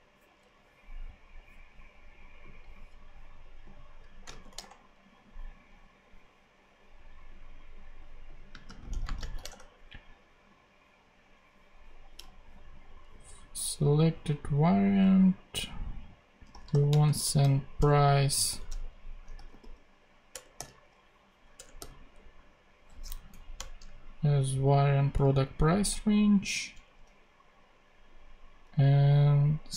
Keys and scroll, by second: 4.2 space, 4.3 shift+[, 4.5 shift+Return, 8.3-9.7 typing, 10.4 Return, 16.1-17.6 typing, 17.7 shift+Return, 18.4 Return, 18.7 Left, 19.0-20.5 typing, 20.2 Return, 21.5 Return, 21.7 ., 23.0 Down, 23.5 Return, 24.0 super+Right, 25.3 ;, 26.7 Return, 29.4-29.7 typing.